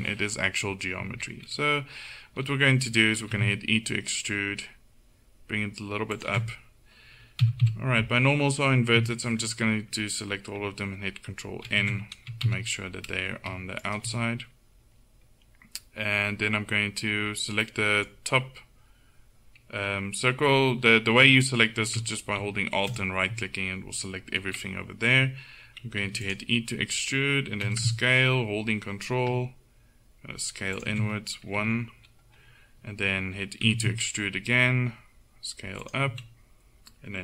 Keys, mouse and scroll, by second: 3.3 e, 7.5 a, 7.7 a, 11.7 ctrl+n, 12.5 a, 17.7 middle click, 20.9 a, 22.9-25.1 right drag, 26.1 e, 27.7 s, 31.6 KP_1, 33.7 e.